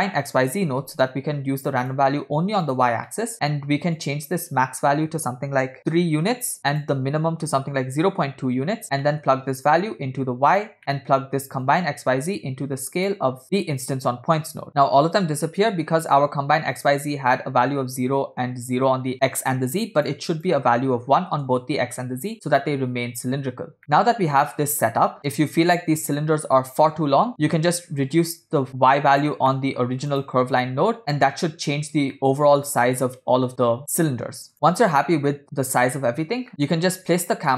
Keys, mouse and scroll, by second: 3.1 middle click, 3.4 scroll up 2, 4.0-5.9 drag, 6.8-8.2 drag, 9.0 middle click, 9.8 click, 10.8 middle click, 11.7-13.2 drag, 13.4 middle click, 13.4 scroll down 2, 13.8 click, 14.7 middle click, 15.5 middle click, 15.8 scroll up 2, 16.8-20.1 drag, 20.4-21.4 drag, 23.8 scroll down 3, 23.8-25.1 middle drag, 25.2 scroll down 3, 25.3-25.7 middle drag, 26.3 scroll up 2, 27.4 scroll up 2, 27.9-29.3 shift+drag, 29.5 middle click, 30.2 click, 30.7 middle click, 31.0 click, 32.2-32.8 middle drag, 34.5 middle click, 34.5-35.1 scroll down 4, 35.4 middle click, 35.8-36.2 scroll down 2.